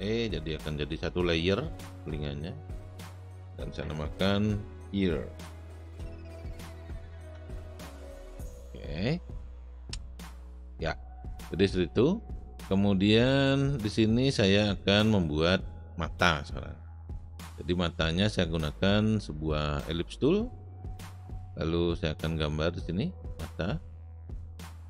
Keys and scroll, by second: 5.0-6.5 typing, 7.3 Return.